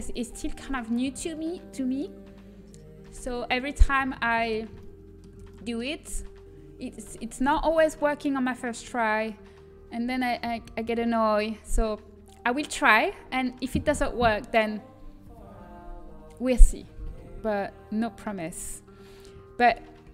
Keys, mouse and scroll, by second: 1.3-3.5 middle drag.